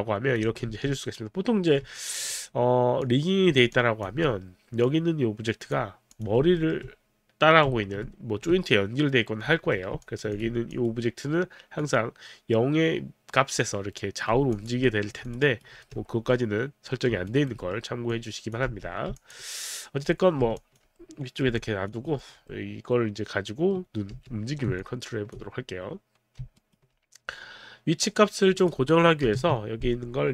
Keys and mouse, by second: 0.7 w, 1.9 alt+click, 3.0 click, 3.7 alt+click, 6.1 click, 6.5 alt+middle click, 6.5 click, 10.0 alt+click, 10.4 alt+click, 11.8 click, 14.5 alt+click, 14.8 alt+middle click, 15.3 alt+click, 15.4 alt+right click, 15.8 w, 16.4 middle click, 17.2 alt+right click, 17.6 alt+middle click, 18.1 alt+click, 18.4 alt+click, 18.7 w, 19.2 alt+w, 19.2 alt+click, 20.1 middle click, 20.5 alt+click, 21.6 alt+click, 22.0 alt+right click, 22.2 alt+middle click, 24.1 z, 24.8 alt+click, 26.5 alt+right click, 28.6 click, 29.3 click, 29.3 KP_0, 29.4 Return.